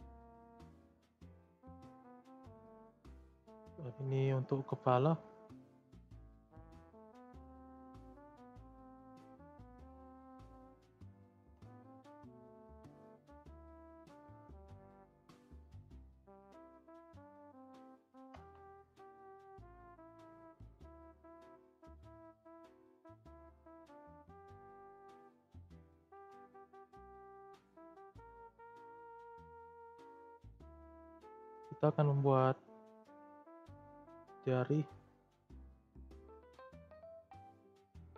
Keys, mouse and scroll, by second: 0.1 ctrl+a, 3.5-5.7 middle drag, 5.7-7.1 drag, 7.1 g, 10.4 click, 10.9 click, 11.3 ctrl+a, 16.2 click, 16.5-18.1 middle drag, 18.1 ctrl+a, 19.8 middle click, 20.4 click, 21.0 click, 21.4-21.8 shift+middle drag, 21.8-22.3 scroll down 2, 22.3 middle click, 22.7 e, 24.7 middle click, 24.7 scroll up 2, 25.0 click, 26.1 ctrl+a, 29.9-30.4 shift+scroll up 3, 30.0 shift+middle click, 30.5 click, 30.9-31.3 shift+scroll up 3, 30.9-31.3 shift+middle drag, 32.1-33.5 shift+middle drag, 33.5 click, 34.1-35.3 shift+scroll up 3, 34.1 shift+middle click, 35.3 e, 37.0 click, 37.4 e.